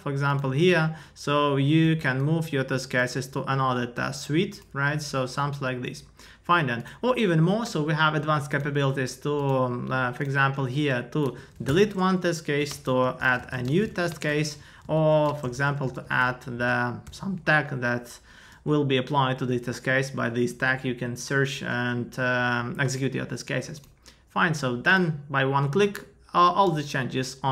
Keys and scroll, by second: 11.3 shift+Up, 14.6 Up, 14.9 super+Right.